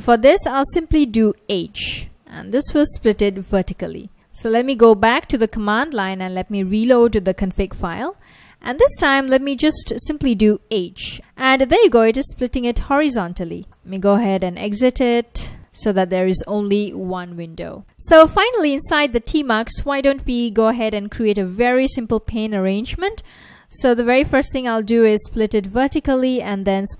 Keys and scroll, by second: 1.8 h, 3.3 v, 3.8 super+s, 4.1 super+Tab, 6.3 ctrl+a, 6.6 r, 9.7 ctrl+a, 10.5 h, 11.1 ctrl+a, 11.7 h, 13.4-16.1 typing, 17.8 typing, 24.7 ctrl+a, 25.3 v, 26.7 ctrl+a.